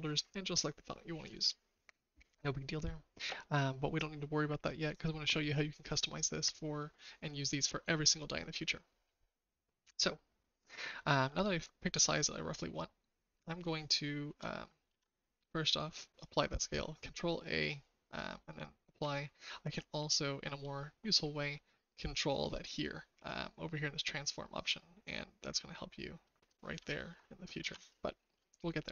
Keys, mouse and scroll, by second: 13.6-14.3 shift+middle drag, 14.8 ctrl+a, 18.5 shift+middle click, 24.6-26.5 drag, 24.6 right click, 27.6 ctrl+z.